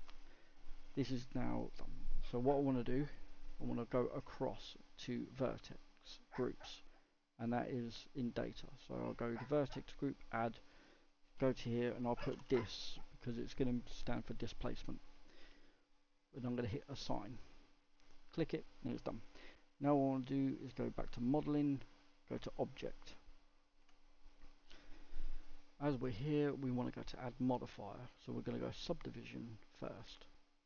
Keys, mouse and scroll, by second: 9.9-16.3 drag, 16.8-22.3 drag, 22.3 Tab, 23.2-28.9 shift+middle drag, 28.9-30.6 drag.